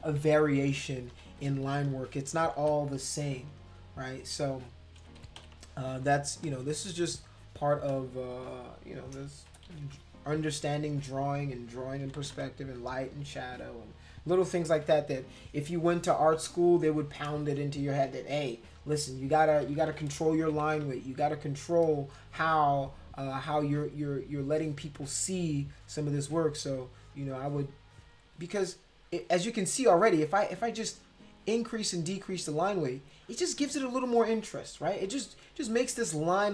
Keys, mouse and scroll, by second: 0.0 ctrl+-, 0.2 ctrl+-, 1.1 ctrl+z, 1.3 ctrl+z, 1.5 ctrl+z, 1.7 ctrl+z, 1.8 ctrl+z, 2.0 ctrl+z, 2.5 ctrl+z, 3.1 ctrl+z, 5.0 ctrl+-, 5.2 ctrl+-, 5.4 ctrl+-, 6.0 space, 6.4 click, 7.2 click, 7.9 click, 8.5 click, 9.5 ctrl+=, 9.7 ctrl+=, 12.0 [, 12.2 [, 12.3 [, 20.4 ], 20.6 ], 20.8 ], 24.4 click, 25.8 click, 26.1 click, 26.5 click, 27.0 click, 27.4 click, 27.9 click, 29.2 click, 29.5 click, 30.0 click, 30.4 click, 30.9 click, 31.4 click, 31.8 click, 33.5 click, 33.8 click, 35.5 click, 35.9 click, 36.3 click.